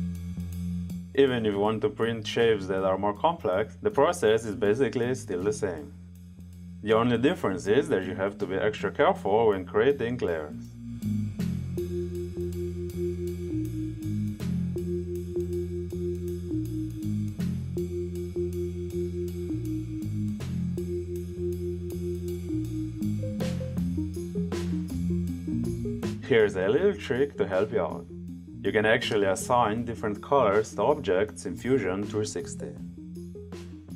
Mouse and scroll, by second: 1.7 click, 3.9 click, 6.6 click, 7.5 click, 7.9 click, 8.1 click, 8.6 click, 9.0 right click, 9.3 click, 9.6 click, 9.8 click, 11.7 click, 11.9 drag, 13.5 click, 14.2 click, 15.0 click, 15.5 click, 15.7 click, 15.8 click, 16.0 click, 16.4 click, 16.6 click, 16.9 click, 17.2 click, 17.7 click, 18.0 click, 18.4 click, 20.4 click, 21.2 click, 24.9 click, 32.8 right click.